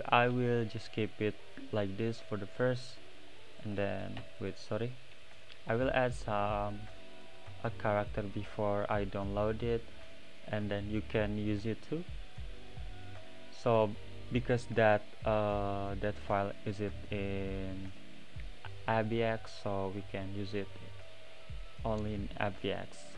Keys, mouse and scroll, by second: 2.6 click, 3.0-3.3 middle drag, 3.3 scroll down 1, 4.2 n, 4.4 click, 4.7-22.9 middle drag, 22.9 click.